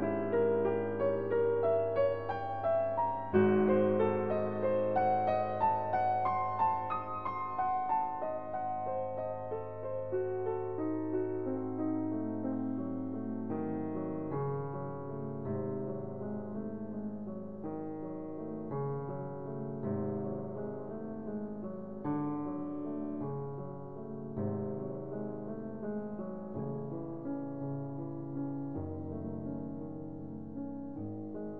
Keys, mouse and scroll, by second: 0.4 click, 2.1 click, 4.2 click, 5.0 click, 8.2 click, 10.5 click, 12.9 click, 13.8 scroll, 16.1-17.2 middle drag, 19.5-20.6 drag, 21.2-22.2 drag, 23.7 scroll, 24.0 middle click, 24.7-25.9 drag, 26.0-27.1 drag, 27.3-28.3 ctrl+drag, 30.1 click.